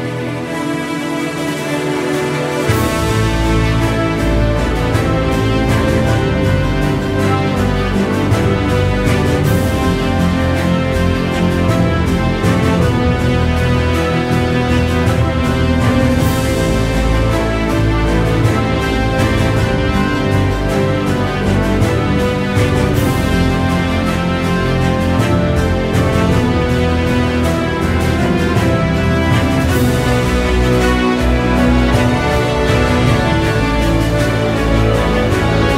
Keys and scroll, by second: 18.3 ctrl+z.